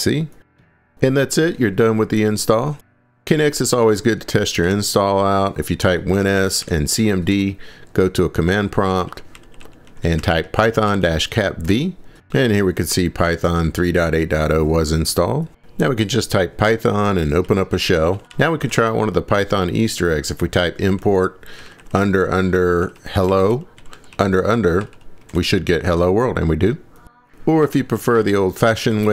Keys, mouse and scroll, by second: 3.2 click, 4.5 click, 4.7 super+s, 5.9-7.8 typing, 7.3 Return, 8.9-11.7 typing, 17.2-18.8 typing, 20.6-25.3 typing, 27.6-29.1 typing.